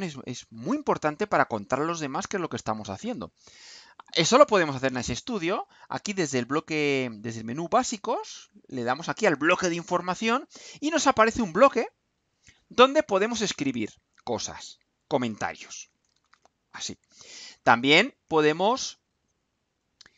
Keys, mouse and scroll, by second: 9.3 click, 12.2 click, 14.8 click, 15.3-16.9 typing, 18.2 click, 19.5 click.